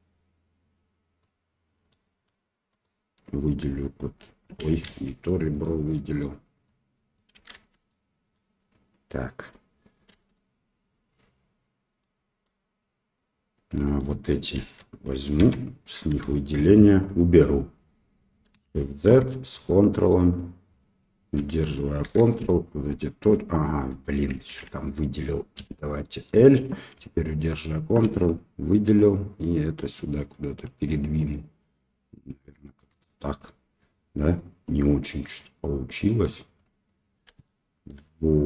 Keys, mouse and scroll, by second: 1.8 middle click, 2.7 click, 3.8 click, 4.8 ctrl+z, 5.5 click, 6.7 click, 7.5 ctrl+z, 7.8 middle click, 10.1 l, 11.9 middle click, 13.7 middle click, 14.5 KP_1, 15.3 KP_3, 16.2 shift+middle click, 18.6 shift+z, 19.6 ctrl+click, 22.0 1, 22.5 ctrl+click, 24.4 alt+a, 25.5 l, 27.2 ctrl+click, 28.9-30.5 drag, 31.2-32.6 drag, 34.6 click, 35.3-36.5 drag, 37.4 shift+middle click.